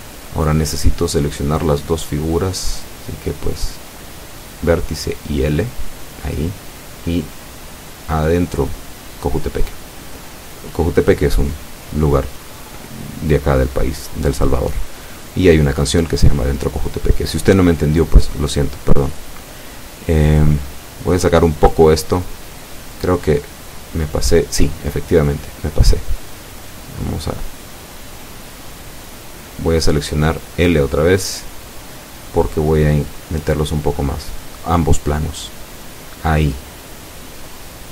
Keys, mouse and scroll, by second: 0.0-2.6 drag, 3.0 middle click, 4.3-6.8 drag, 7.3-9.6 drag, 10.0-11.0 middle drag, 12.5 shift+right click, 13.9 l, 15.4-18.7 drag, 19.1 Tab, 19.5-21.6 middle drag, 21.8 scroll up 2, 22.1 scroll down 2, 22.5 Tab, 23.2 click, 24.1 right click, 24.8 z, 26.4 right click, 27.4 l, 28.9-31.4 drag, 31.4 Tab, 32.4 z, 32.8-34.3 middle drag, 35.7 z, 36.5-37.9 middle drag.